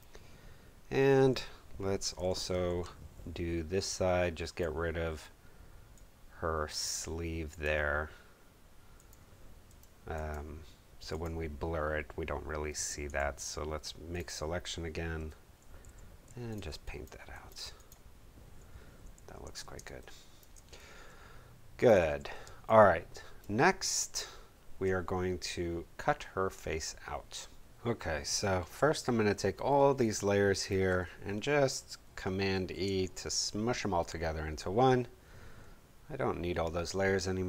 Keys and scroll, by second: 2.2 p, 15.1 Home, 16.2 alt+b, 19.1 super+d, 20.0 super+space, 22.0 v, 22.4 space, 32.5 super+e.